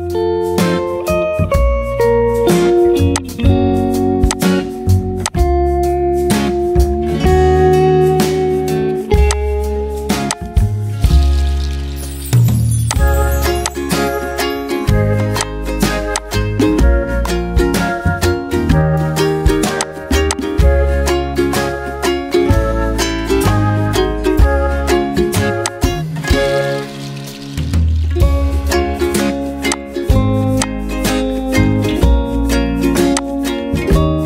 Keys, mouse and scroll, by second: 8.1 ctrl+z, 18.5 Delete, 21.7 Delete.